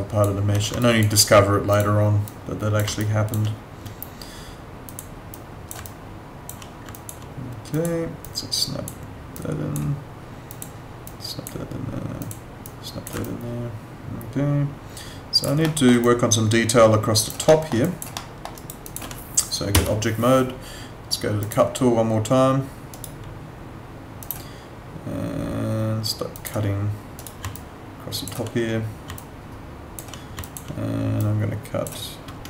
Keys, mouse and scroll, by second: 0.8 alt+click, 3.0 alt+click, 5.8 alt+click, 7.0 alt+click, 13.2 alt+click, 15.6 alt+middle click, 16.0 alt+click, 17.4 alt+middle click, 17.8 alt+click, 18.1 alt+middle click, 18.5 alt+right click, 18.8 alt+click, 19.7 F8, 21.4 click, 22.9 right click, 24.2 click, 27.2 right click, 27.5 alt+click, 29.2 alt+click, 30.4 alt+click.